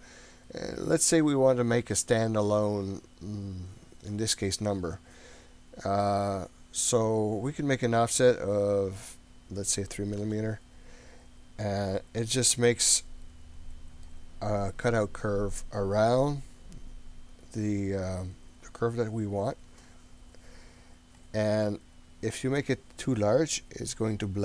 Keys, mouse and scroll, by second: 11.6-14.1 middle drag, 21.4-22.1 scroll down 3, 22.1-22.7 scroll up 2.